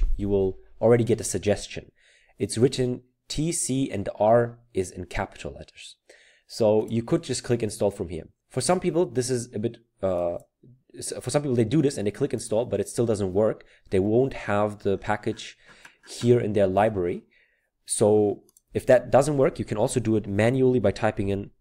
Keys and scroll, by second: 21.2-21.6 typing.